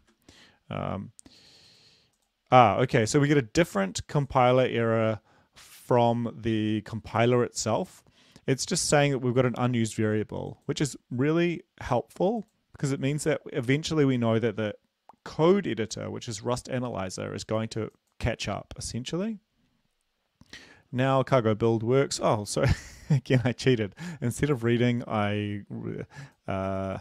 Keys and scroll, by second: 1.0 ctrl+`, 13.7 ctrl+`.